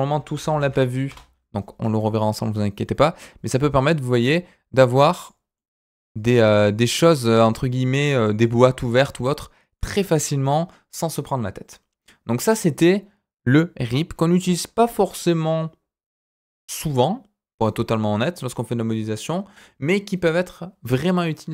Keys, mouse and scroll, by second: 2.3-4.3 drag, 5.2 click, 5.5-8.0 middle drag, 8.1 click, 8.4 middle click, 9.5 scroll down 2, 9.7 middle click.